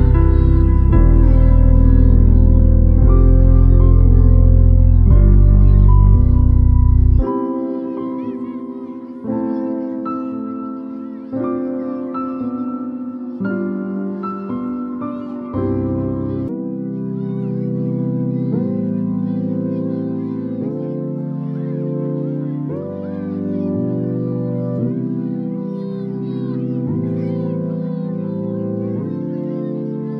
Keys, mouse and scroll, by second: 3.8-8.2 drag, 9.3 ctrl+t, 10.9-11.3 click, 11.3-12.0 click, 14.1 ctrl+click, 15.5-16.9 shift+drag, 20.4 alt+scroll up 1, 21.5 space, 21.6 click, 21.6-22.3 click, 22.1 space, 24.9-30.1 drag.